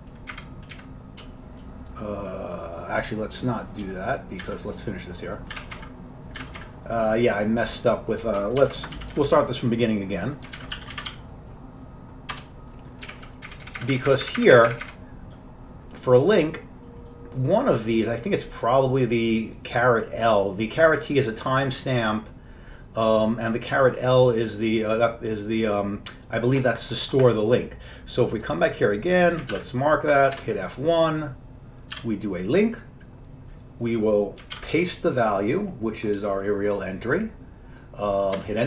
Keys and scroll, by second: 0.4 Up, 0.8 Down, 1.3 BackSpace, 3.9 BackSpace, 4.6 alt+Tab, 5.0 alt+Tab, 5.0 BackSpace, 5.7 alt+Tab, 6.5 alt+Tab, 6.7 alt+Tab, 8.7 ctrl+x, 8.8-11.7 typing, 12.5 Return, 13.2 Down, 13.6 Up, 13.8 Up, 13.9 Up, 14.0 Up, 14.2 Up, 14.4 Up, 14.5 Up, 14.6 Up, 14.8 Up, 15.0 Up, 29.7 ctrl+c, 30.5 F1, 32.0 l, 34.7 ctrl+y, 34.7 ctrl+u, 38.5 Return.